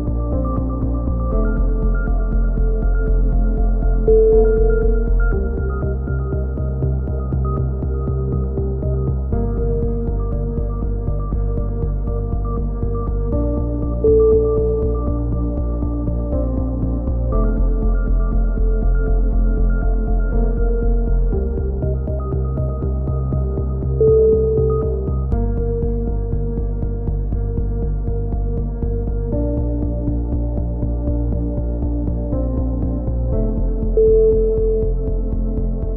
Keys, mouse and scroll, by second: 1.1-3.0 middle drag, 3.0 click, 3.5 middle click, 4.5 click, 5.0-6.2 middle drag, 5.7 c, 6.2 right click, 7.2 click, 8.4-10.1 middle drag, 8.7 a, 11.5 ctrl+r, 14.1 a, 15.0 b, 18.0 g, 24.5 a, 25.2 click, 26.1-28.5 middle drag, 27.9 c, 28.6 right click, 28.8-29.9 drag, 30.2 a, 30.3 middle click, 30.5 z, 30.8 click, 33.1 KP_1, 33.5 z, 35.0 middle click.